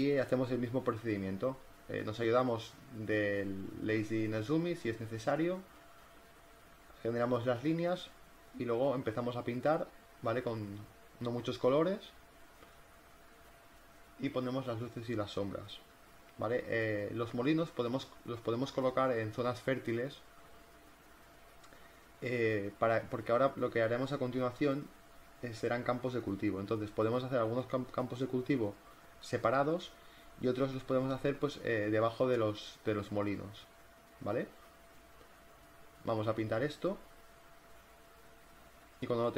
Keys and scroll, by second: 4.8 ctrl+alt+z, 4.9-8.3 typing, 6.3 ctrl+t, 8.8 ctrl+z, 9.4 [, 10.0 e, 10.5 ctrl+z, 10.9 [, 12.9 ctrl+z, 13.5 b, 13.5 ctrl+z, 13.9 space, 14.8 z, 16.6 v, 17.7 ctrl+t, 18.1 Return, 18.2 z, 18.6 ctrl+t, 19.0 Return, 19.0 v, 19.7 ctrl+t, 20.0 Return, 20.1 v, 21.2 z, 22.2 b, 25.9 [, 27.7 ctrl+z, 30.8 ctrl+z, 35.1 b, 35.4 ], 35.5 ctrl+z, 37.1 ctrl+z, 38.2 [, 38.5 [, 38.6 ], 39.0 space.